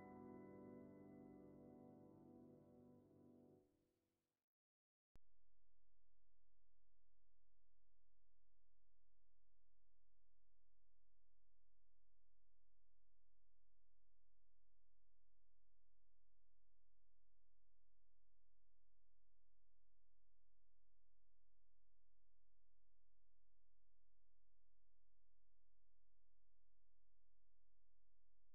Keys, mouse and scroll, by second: 0.5 alt+click, 1.3-1.9 ctrl+z, 3.1 click, 4.0 scroll down 1, 4.3 alt+click, 4.8 alt+s, 7.0 alt+click, 7.4 right click, 8.7 click, 9.0 right click, 9.2 alt+click, 9.5 scroll up 1, 10.0 click, 10.4 shift+click, 10.7 scroll up 1, 11.1 shift+click, 12.3 click, 16.2 alt+click, 17.3 scroll down 1, 20.5 alt+right click, 21.6 click, 22.0 alt+right click, 22.3 alt+click, 23.2 alt+right click.